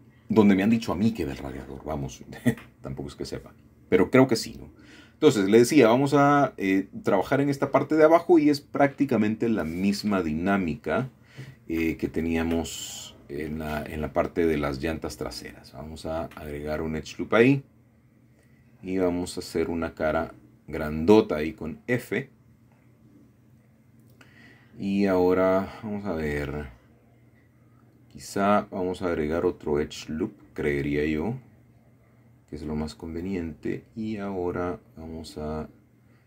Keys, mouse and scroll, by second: 4.7 middle click, 5.8 Tab, 6.4 shift+middle click, 8.2 middle click, 9.5 middle click, 10.5 middle click, 13.0 middle click, 14.9 ctrl+r, 15.7 click, 18.0 click, 18.6 click, 19.4 shift+click, 20.1 shift+click, 21.5 click, 23.0 f, 24.0 middle click, 27.1 middle click, 28.5-29.7 middle drag, 29.9 shift+middle click, 30.3 shift+middle click, 30.5 shift+middle click, 31.9 click, 32.5 click, 34.1 shift+middle click, 35.0 shift+middle click, 36.0-36.2 drag.